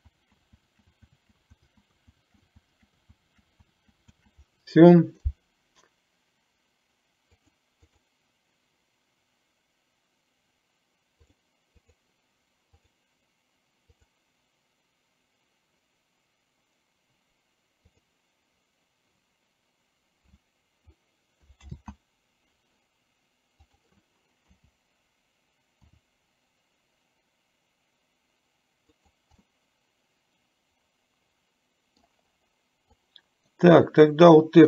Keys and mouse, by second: 0.2 ctrl+z, 0.9 ctrl+z, 1.2 ctrl+z, 7.5 click, 11.9 click, 18.0 click, 21.9 ctrl+z, 23.7 click, 26.0 r, 29.5-32.2 middle drag, 33.0-33.7 drag.